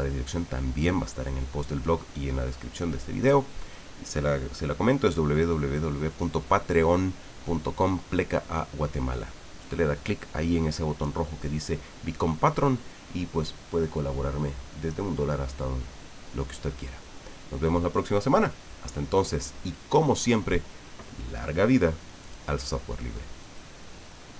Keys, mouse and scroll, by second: 23.4 click.